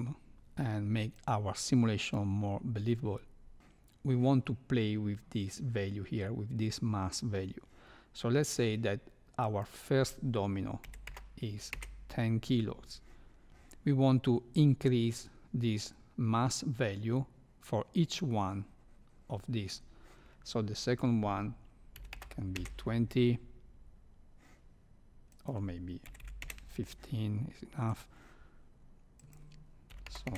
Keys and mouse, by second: 1.2 drag, 2.0 click, 9.5-12.5 drag, 20.8-23.0 drag, 25.3-26.9 drag, 29.1-30.3 drag.